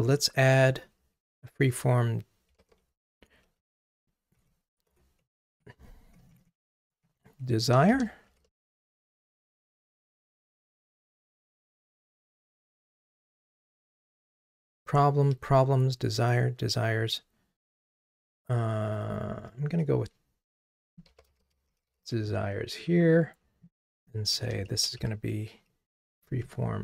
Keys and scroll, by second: 2.7 super+d, 3.7 alt+shift+Down.